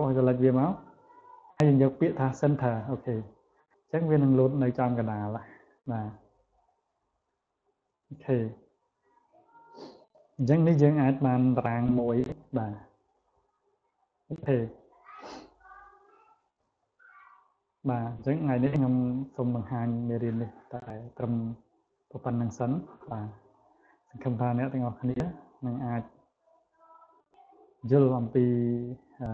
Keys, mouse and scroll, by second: 2.4 click, 4.7 click, 5.1 click, 5.4 click, 5.8 click, 6.4 click, 6.7 click, 7.0 click, 7.3 click, 8.1 click, 8.6 click, 9.0 click, 10.1 click, 13.0 click, 13.4 click, 13.9 click, 14.2 click, 14.6 click, 16.1 click, 16.6 click, 17.4 click, 18.8 click, 19.5 click, 20.1 click, 21.0 click, 21.8 click, 22.2 click, 22.9 click, 23.2 click, 23.9 click, 24.3 click, 24.8 click, 25.5 click, 25.9 click, 26.7 click, 27.8 click, 28.3 click.